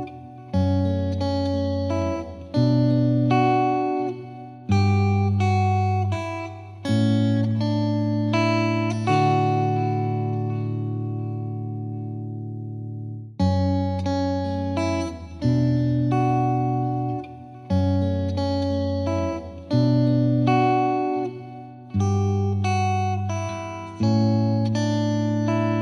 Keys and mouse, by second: 1.0 click, 4.5 ctrl+z, 4.5 click, 5.2 click, 8.0 click, 12.3 ctrl+i, 19.3 click, 21.5 click, 24.2 click.